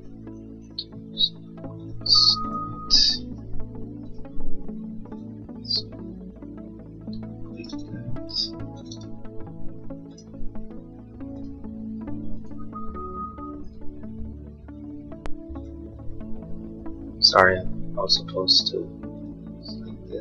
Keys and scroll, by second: 3.2 Escape, 3.4 space, 8.9 ctrl+z.